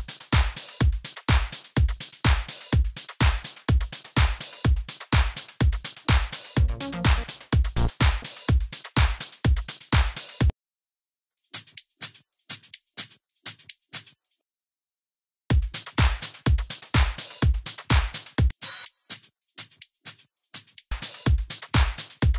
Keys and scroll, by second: 0.5 Left, 1.3 Down, 1.7 Right, 2.2 Down, 3.1 Right, 3.3 Down, 4.2 Right, 6.5 Down, 10.5 space, 15.2 x, 15.5 s.